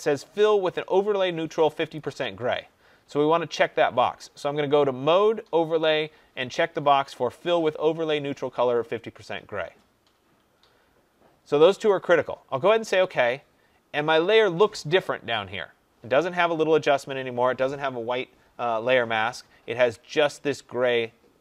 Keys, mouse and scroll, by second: 1.9-9.0 drag, 12.8-17.9 drag.